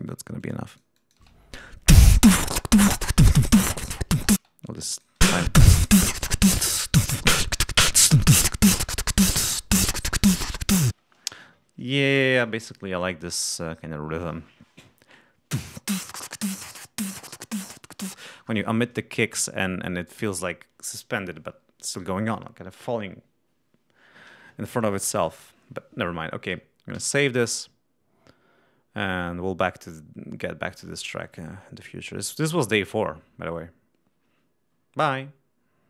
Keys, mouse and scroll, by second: 0.2-1.1 drag, 1.1 space, 2.2 ctrl+scroll down 2, 2.8 ctrl+scroll up 2, 4.3 space, 4.8 click, 5.2 space, 7.5 7, 8.0 ctrl+scroll up 2, 9.5 ctrl+scroll down 2, 10.8 space, 18.3-19.1 scroll up 2, 19.1-19.5 scroll down 2, 26.8 ctrl+s.